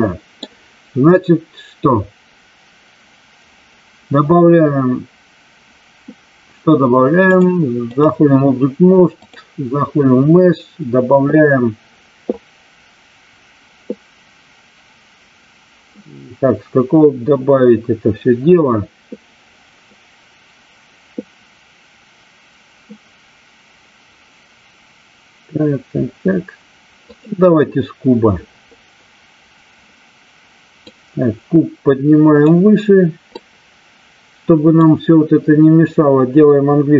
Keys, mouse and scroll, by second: 7.4-7.9 drag, 9.2-27.2 drag, 30.9-32.4 drag, 33.3-34.8 drag, 36.8 h.